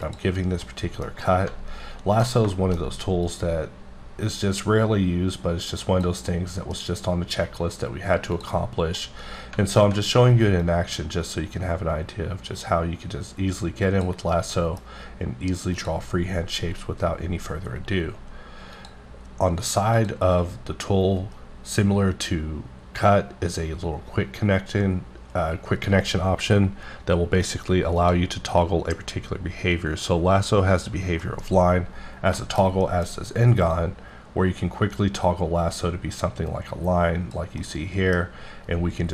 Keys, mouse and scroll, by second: 0.0 click, 0.4 scroll down 1, 0.6 middle click, 1.2 middle click, 3.2 click, 6.3 middle click, 8.3 click, 9.0 middle click, 10.6 click, 14.2 scroll down 1, 14.3 middle click, 15.7 click, 18.7 click, 19.9 click, 28.0 click, 31.2 middle click, 31.5-31.9 scroll up 2, 32.4 shift+middle click, 33.1 scroll down 1, 33.7 click, 37.6 middle click.